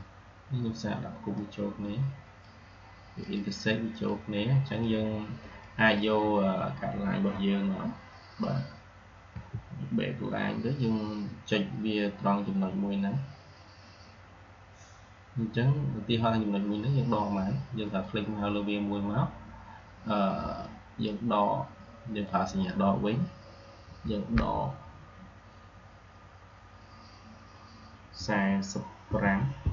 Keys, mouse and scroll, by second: 5.8-6.1 drag, 9.2 \, 17.7 click, 20.5-21.1 drag.